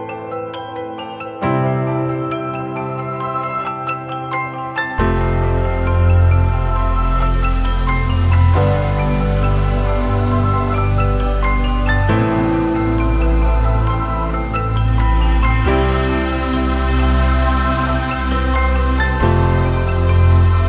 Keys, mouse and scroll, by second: 2.5 ctrl+=, 2.6 ctrl+=, 3.0 ctrl+=, 4.2-4.6 typing, 16.1 typing, 18.6 typing.